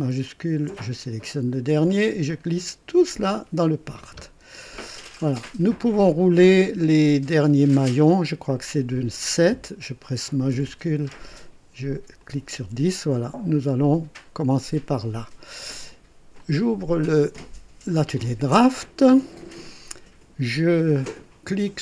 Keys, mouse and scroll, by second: 0.2 shift+click, 1.8-3.1 drag, 4.8 click, 5.5 scroll down 1, 6.1-6.8 right drag, 9.2 click, 12.2 shift+click, 18.0 click.